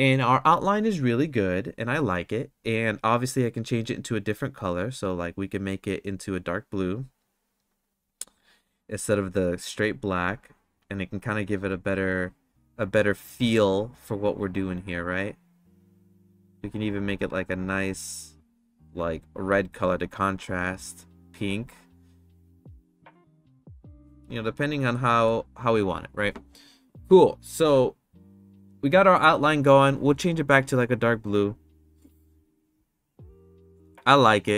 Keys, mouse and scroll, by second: 3.7 click, 8.4 click, 25.0 middle click.